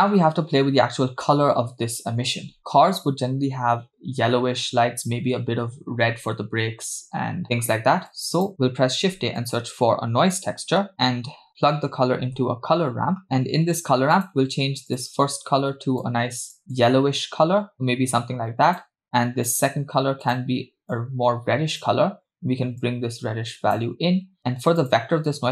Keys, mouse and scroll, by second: 0.5-1.4 scroll down 1, 7.4 middle click, 8.1-8.5 drag, 8.9 shift+a, 10.9 click, 11.5 shift+a, 13.2 middle click, 13.2 scroll up 3, 14.2 click, 14.9 click, 19.5 click, 20.3 click, 22.8-23.9 drag, 24.1-24.8 scroll down 2, 24.8 click, 25.4-25.5 scroll down 3.